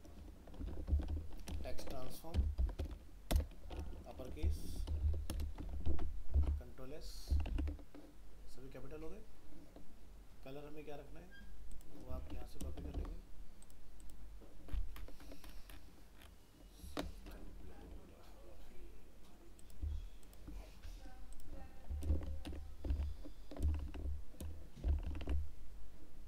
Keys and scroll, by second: 5.8 ctrl+s, 6.4 alt+Tab, 13.0 ctrl+w, 22.1 ctrl+c, 22.9 alt+Tab.